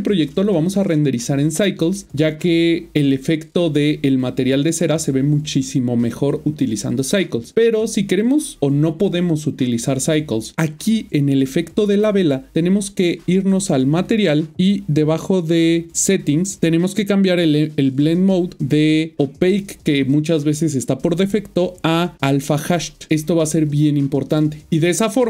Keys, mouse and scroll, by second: 14.0 click, 14.8-16.6 scroll down 1, 16.6 click.